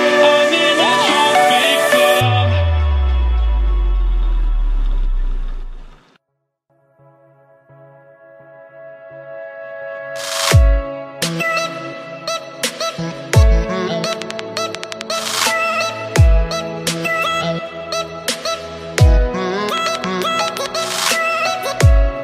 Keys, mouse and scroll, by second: 1.0-4.4 drag, 4.4 KP_3, 5.0-5.4 scroll up 1, 6.0-6.4 scroll down 1, 6.7-9.3 drag, 9.3-10.0 scroll up 1, 10.4-12.2 drag, 12.2-13.5 shift+middle drag, 13.5 shift+d, 17.7 KP_7, 18.7 click, 19.1 scroll down 1, 21.1 click.